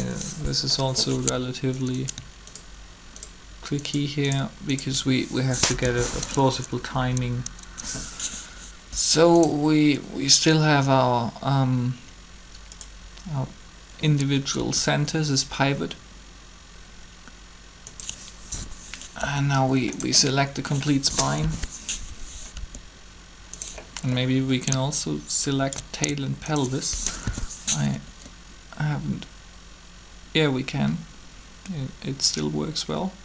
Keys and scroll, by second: 0.0 3, 5.8 shift+1, 7.1 1, 8.1 Up, 8.9 r, 14.6 r, 19.0 r, 21.3 1, 22.5 r, 27.2 shift+1, 28.0 1, 29.2 r.